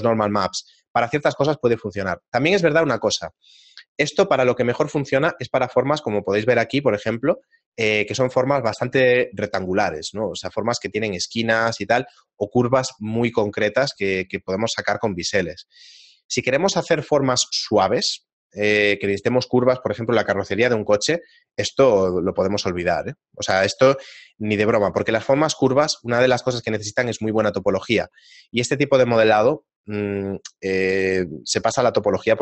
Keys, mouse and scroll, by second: 1.8 shift+middle click, 14.4 shift+middle click, 15.7 shift+middle click.